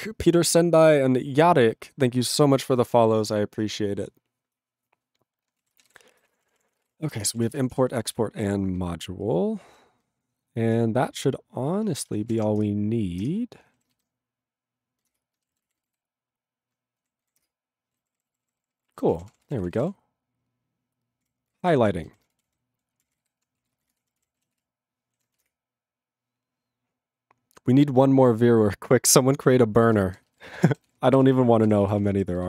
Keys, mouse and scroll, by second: 5.7 ctrl+a, 5.7 ctrl+space, 5.8 ctrl+e, 5.9 ctrl+g, 6.1 ctrl+n, 6.2 ctrl+space, 6.3 ctrl+a, 6.3 ctrl+p, 6.8 ctrl+g, 6.8 ctrl+e, 7.0 ctrl+a, 7.1 ctrl+space, 7.2 ctrl+e, 7.3 ctrl+n, 7.4 ctrl+e, 7.6 ctrl+n, 7.7 Tab, 8.1 ctrl+s, 8.8 ctrl+n, 9.3 ctrl+n, 13.3 ctrl+Return, 15.2 ctrl+Return, 17.5 ctrl+Return, 18.0 ctrl+=, 18.6 ctrl+=, 19.1 ctrl+a, 19.1 ctrl+p, 19.3 ctrl+p, 19.4 ctrl+space, 19.4 ctrl+e, 19.7 ctrl+n, 19.8 ctrl+e, 19.8 ctrl+g, 21.5 ctrl+n, 21.6 ctrl+o, 21.8 ctrl+o, 22.1 ctrl+n, 22.1-23.5 typing, 23.7 ctrl+a, 23.7 ctrl+space, 23.8 ctrl+n, 23.9 ctrl+w, 24.0 ctrl+p, 24.2 ctrl+k, 24.6 ctrl+s, 25.5 Return, 30.0 ctrl+space, 30.4 ctrl+alt+b, 30.5 ctrl+g, 30.8 ctrl+s, 31.0 ctrl+space, 31.4 ctrl+alt+f, 31.7 ctrl+g, 32.0 ctrl+s, 32.1 ctrl+space.